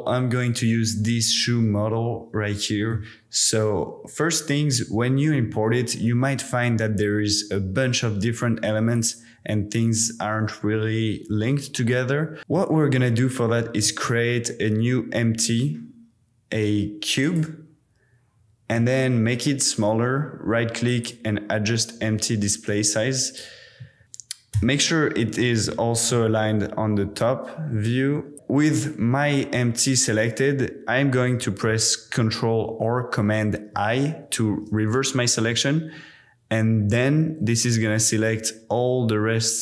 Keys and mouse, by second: 1.6-2.9 middle drag, 9.0 middle click, 9.4 g, 11.5 click, 13.8 shift+a, 19.4 click, 21.7-22.4 middle drag, 23.2 shift+click, 24.0 click, 24.5 KP_7, 26.1 g, 26.5 u, 27.1 y, 33.8 super+i, 37.8-38.7 drag, 38.7-39.6 middle drag.